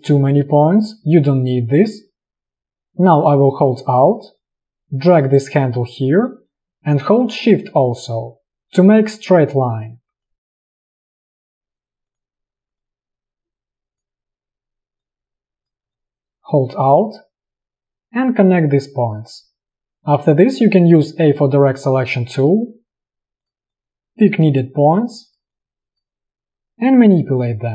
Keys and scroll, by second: 11.1 space, 15.9 space, 20.7 a, 24.6 space.